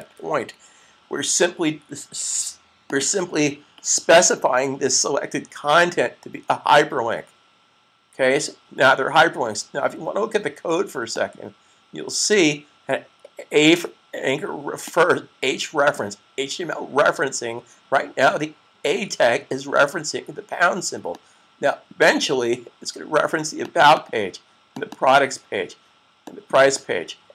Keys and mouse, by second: 2.1 super+s, 11.0 click, 14.7 click, 20.9 click, 23.5 click, 23.7 double click, 26.1 click, 26.5 double click.